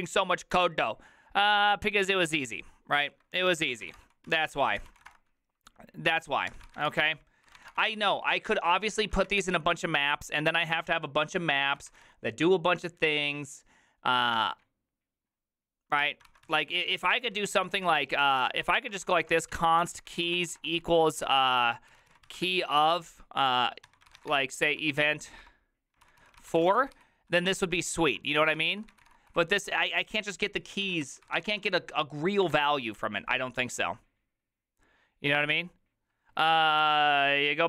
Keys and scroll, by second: 3.7-7.7 typing, 6.6 Tab, 7.8 Return, 8.1 ctrl+u, 8.5 ctrl+u, 9.1-10.5 typing, 11.8 ctrl+c, 12.0 typing, 14.5 typing, 16.1 alt+{, 16.3 ctrl+c, 16.5-27.5 typing, 24.8 Return, 26.1 ctrl+n, 26.3 ctrl+y, 28.6 ctrl+c, 28.7-31.9 typing, 32.6 alt++.